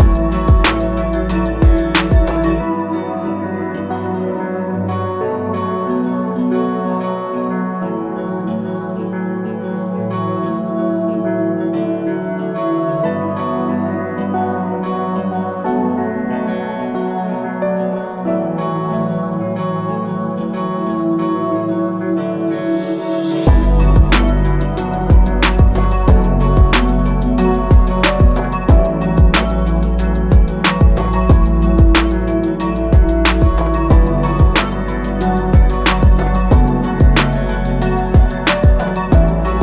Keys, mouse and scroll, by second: 1.1 click, 1.5 alt+scroll down 2, 3.3 alt+scroll up 1, 4.9 click, 12.4 ctrl+z, 13.8 click, 27.0 click.